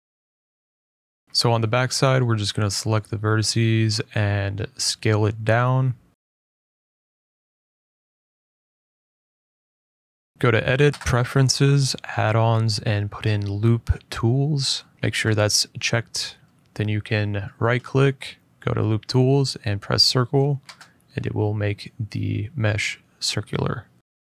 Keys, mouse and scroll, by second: 1.2 middle click, 1.9 shift+click, 3.8 shift+click, 4.1 shift+middle click, 4.6 shift+click, 5.0 middle click, 5.5 middle click, 5.8 s, 8.0 click, 8.6-9.4 scroll, 10.3 right click, 10.3 click, 10.9 click, 11.9 click, 12.6 click, 13.4-13.9 typing, 16.5 click, 16.5 middle click, 16.8 right click, 19.1 click, 20.3 middle click, 20.8 middle click, 20.8 a, 21.4 `, 21.7 click, 22.2 middle click, 22.2 middle click, 22.4 middle click, 22.7 scroll, 22.7 g, 24.0 scroll.